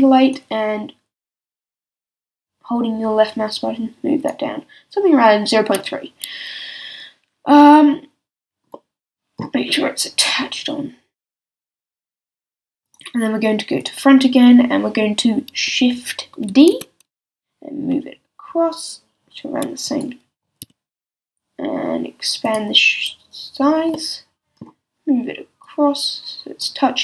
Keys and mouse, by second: 3.8-8.8 middle drag, 10.2-12.1 drag, 16.5 shift+d, 20.0-22.4 drag, 20.6 s, 22.5-25.1 drag, 25.6-27.0 drag.